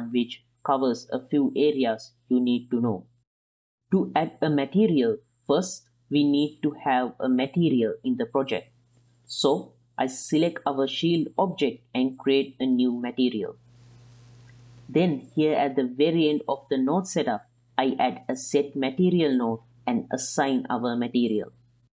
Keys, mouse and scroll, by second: 4.8 s, 6.1 g, 7.4 click, 7.9-9.4 middle drag, 9.6 shift+middle click, 10.6 click, 11.6 click, 12.3 click, 12.8 shift+middle click, 13.1 click, 15.6 shift+a, 20.3 click.